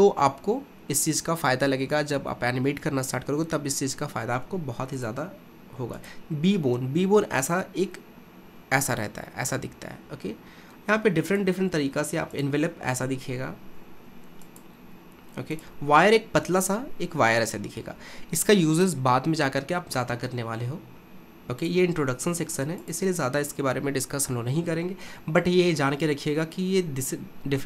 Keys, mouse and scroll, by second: 5.0-8.0 drag, 11.3-16.9 drag, 16.9-17.5 scroll up 1, 17.5-20.6 scroll down 1, 21.6-24.8 drag.